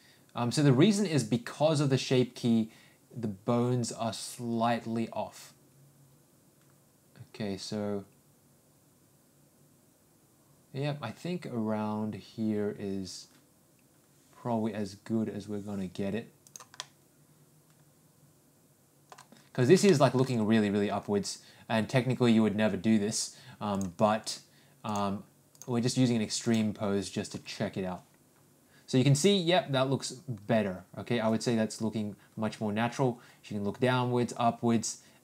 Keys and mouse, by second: 16.8-17.8 middle drag, 18.3 middle click, 19.8 shift+middle click, 24.8 click, 26.6 click, 27.4 g.